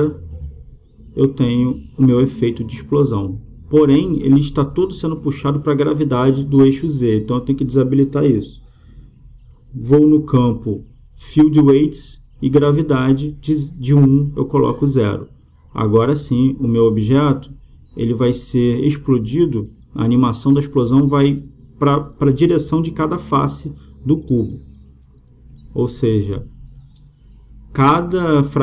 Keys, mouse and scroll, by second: 2.8-4.5 drag, 6.7-10.8 middle drag, 10.8-12.6 drag, 12.6 middle click, 12.8-16.2 drag, 17.4-19.1 drag, 21.6-23.5 drag, 24.2-25.9 drag, 25.3-27.9 middle drag, 28.5-28.6 drag.